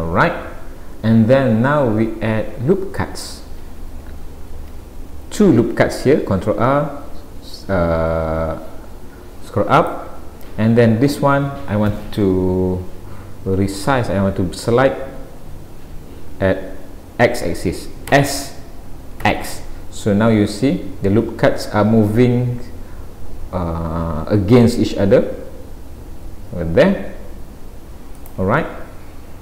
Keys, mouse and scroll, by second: 4.6 ctrl+r, 28.6 middle click.